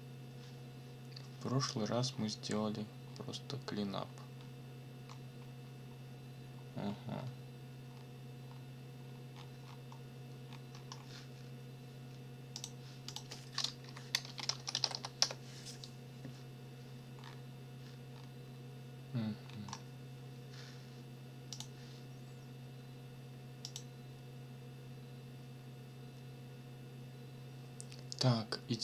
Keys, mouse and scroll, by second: 2.1-2.7 scroll down 4, 3.0 scroll down 2, 3.9-4.7 scroll down 4, 5.1 scroll up 2, 5.9 scroll up 2, 6.8 scroll up 2, 7.9 scroll down 1, 8.4 scroll down 1, 9.0-9.6 scroll down 1, 10.4 scroll up 1, 12.5 click, 13.1 click, 13.8 Up, 14.2 space, 14.5 a, 14.8 l, 15.2 Return, 17.2-17.5 scroll down 2, 18.1 scroll down 2, 18.4 scroll up 2, 19.2-19.9 scroll up 4, 21.5 click, 23.6 click.